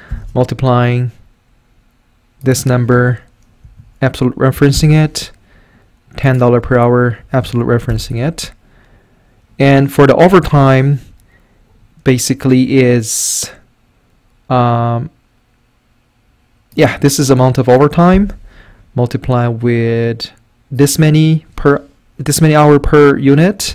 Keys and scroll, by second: 0.1 typing, 3.6 F4, 7.2 F4, 7.9 Return, 10.5 =, 18.1 *.